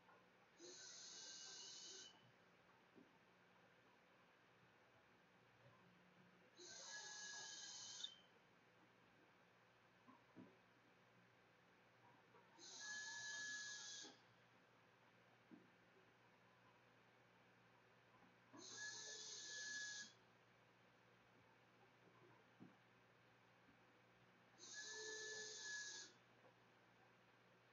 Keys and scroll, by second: 9.9-27.7 typing.